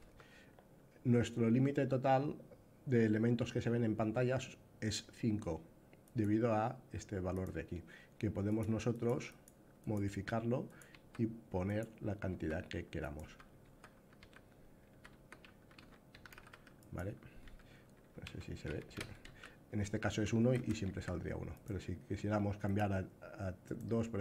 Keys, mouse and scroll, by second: 5.8-7.1 drag, 8.3 click, 8.6 click, 9.0 click, 9.6 click, 10.4 click, 11.1 q, 11.5-12.3 drag, 12.3 q, 12.8 click, 12.9 w, 13.3 w, 13.9 q, 15.6-18.9 typing, 16.6 click, 21.2-22.4 drag, 23.3 click.